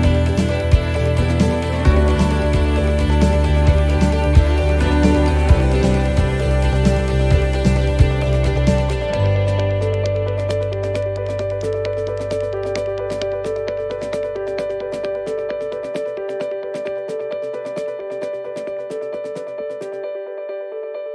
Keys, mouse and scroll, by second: 0.0 a, 3.0 click, 6.0 middle click, 7.0-7.4 scroll down 2, 7.4 middle click, 7.8-8.3 scroll up 3, 9.8 s, 11.2 s, 15.4 s, 20.6 middle click.